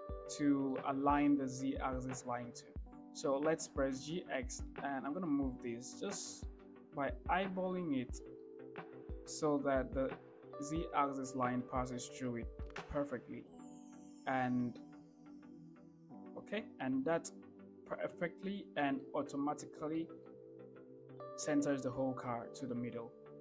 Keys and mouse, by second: 0.7-1.0 shift+middle drag, 4.2 g, 4.6 x, 8.7-9.5 shift+middle drag, 12.6 g, 12.9 x, 19.3 shift+middle drag, 20.2 shift+middle drag, 21.5 shift+middle click.